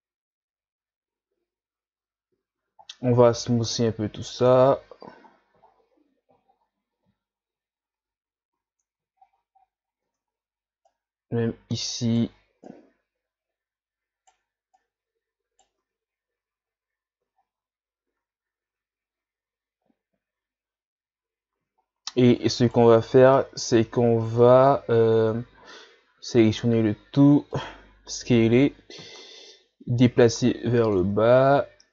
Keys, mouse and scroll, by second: 0.0 z, 2.4 a, 2.6 a, 3.4 w, 5.3-6.5 scroll down 5, 6.5-7.1 shift+scroll up 1, 7.9 Tab, 8.5 a, 9.1-10.1 shift+scroll up 7, 10.1 Tab, 10.9 right click, 12.7 right click, 14.8 right click, 15.8 Tab, 16.6 scroll down 1, 17.3 scroll down 4, 21.8 shift+scroll down 1, 22.1 scroll up 1, 22.6 right click, 23.4 Tab, 23.7 Tab, 24.3 Tab, 25.2 a, 25.6 a, 26.2 s, 28.2 o, 29.2-30.0 scroll down 1, 30.0-31.3 drag, 31.3-31.9 scroll down 1.